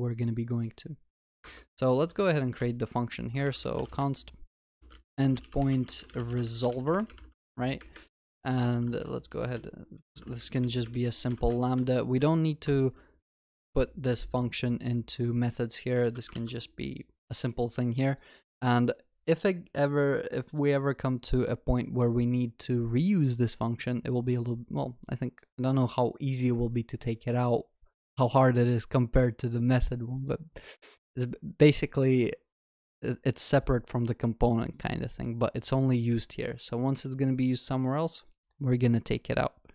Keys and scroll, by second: 16.0 ctrl+alt+shift+l, 16.4 ctrl+s.